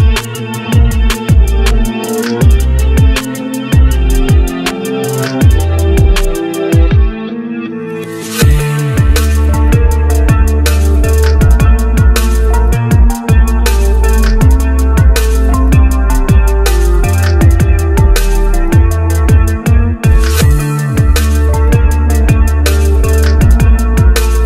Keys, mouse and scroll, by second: 0.2 g, 1.3-2.4 shift+middle drag, 2.4 click, 3.1 click, 4.6 click, 5.0-5.4 scroll up 1, 5.4 middle click, 6.0 Tab, 6.5 click, 7.7-9.2 drag, 11.3 click, 11.7 shift+middle click, 12.4 click, 13.1 e, 14.8 s, 15.8 e, 17.1 e, 18.2 s, 18.9 e, 19.9 s, 20.9 e, 22.0 s, 23.3 e, 24.1 s.